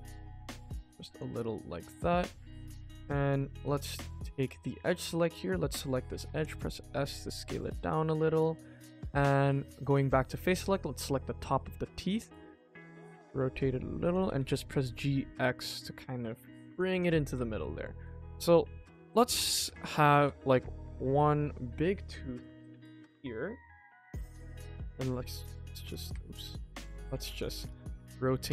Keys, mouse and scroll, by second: 1.3 middle click, 2.9 click, 3.7 alt+click, 4.3 middle click, 6.3 s, 8.4 click, 9.4 click, 9.8 middle click, 10.9 KP_1, 12.1 r, 17.2 g, 18.0 middle click, 18.6 s, 19.4 g, 21.0 middle click, 21.5 middle click, 23.1-23.8 middle drag, 24.3 middle click, 24.7 r, 27.2 click, 27.4 middle click, 27.8 KP_1, 28.0-28.3 scroll down 2, 28.4 shift+middle click.